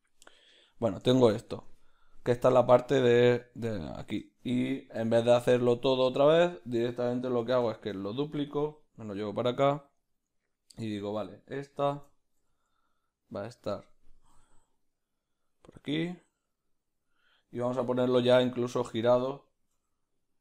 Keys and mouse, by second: 0.0-9.1 middle drag, 1.6 Tab, 5.8 q, 7.8 shift+d, 9.1 r.